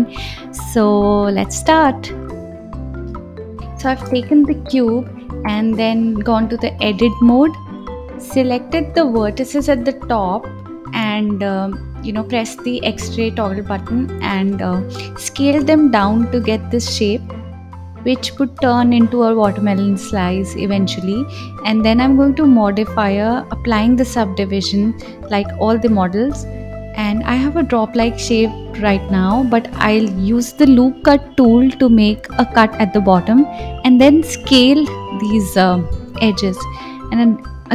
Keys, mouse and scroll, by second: 0.0 shift+a, 1.1 s, 2.5 KP_7, 3.8 click, 5.8 KP_1, 7.5-12.2 drag, 13.6 click, 14.4 click, 15.6 s, 20.1-22.8 drag, 23.5-27.6 drag, 27.6 right click, 29.3-30.9 drag, 30.9 ctrl+r, 34.1 click, 35.1 s, 37.1 click.